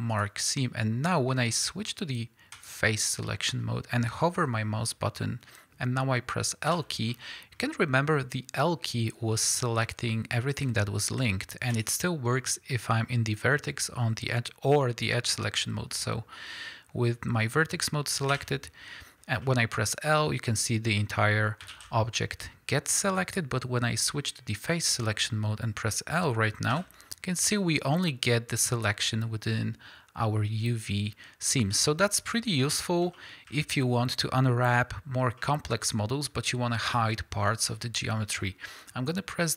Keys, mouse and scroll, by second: 2.5 click, 3.2 middle click, 6.7 l, 7.1-7.6 middle drag, 11.7 click, 18.3 l, 19.4-20.9 middle drag, 21.1 middle click, 21.7 alt+a, 23.2 click, 25.0 middle click, 26.7 l, 31.7-39.5 middle drag.